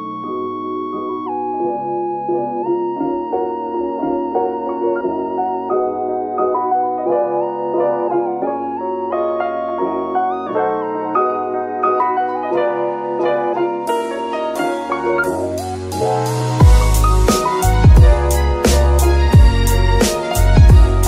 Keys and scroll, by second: 0.3 Tab, 1.6 shift+s, 2.7 Tab, 3.1 shift+s, 4.0 KP_Decimal, 5.6 g, 5.7 y, 10.7 shift+g, 10.9 shift+x, 16.7 g, 17.1 x.